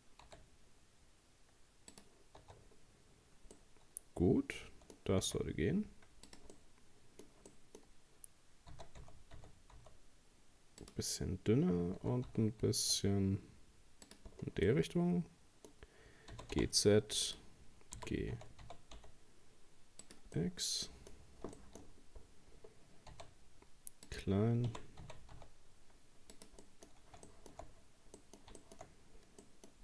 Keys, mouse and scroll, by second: 0.3 s, 2.4 Tab, 2.6-3.1 scroll down 3, 3.1-3.6 scroll up 2, 3.6-5.2 middle drag, 5.2 s, 6.5-7.9 middle drag, 7.9 scroll up 1, 8.7 s, 12.0 s, 14.4 scroll down 2, 14.7-16.3 middle drag, 16.3 g, 18.0 g, 20.4 middle click, 21.1-22.6 scroll up 12, 21.6 shift+middle click, 22.6-23.1 scroll down 3, 23.1 s, 24.7 g, 26.6 middle click, 26.9-27.3 scroll up 2, 27.3 shift+middle click, 27.7-28.2 scroll down 2, 28.2 middle click, 28.9-29.3 scroll up 1, 29.4 middle click.